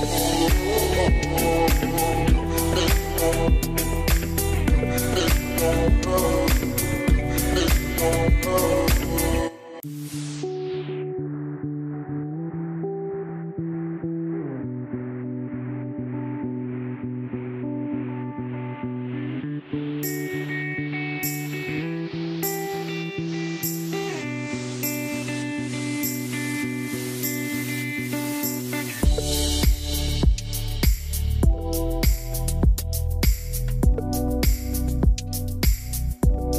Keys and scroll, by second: 19.3-20.7 typing, 21.4 Return.